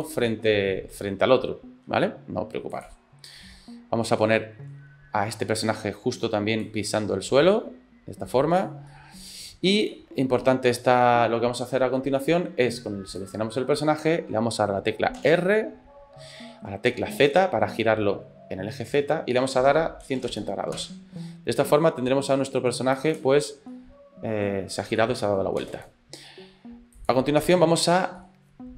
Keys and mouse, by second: 1.0 space, 2.8 click, 4.3 click, 4.5 middle click, 5.4 ctrl+middle click, 6.7-8.7 drag, 8.9 middle click, 9.9 middle click, 13.2 click, 15.2 r, 22.3 click, 23.2 space, 23.7 middle click, 23.9 click, 24.3 middle click, 25.1 shift+middle click, 25.4-28.2 shift+drag, 25.7 space, 28.2 middle click.